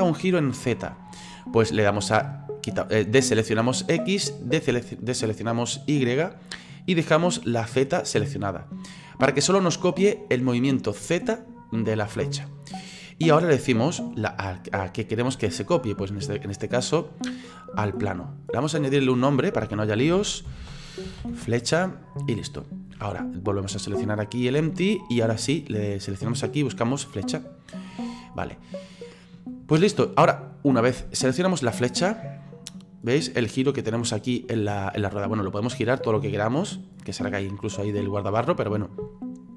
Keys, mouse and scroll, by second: 3.7 click, 5.8 click, 18.7 click, 18.9-24.0 drag, 24.0 right click, 25.7-28.4 drag, 28.4-31.2 middle drag, 31.2 right click, 31.6-32.5 middle drag, 32.5-39.5 drag.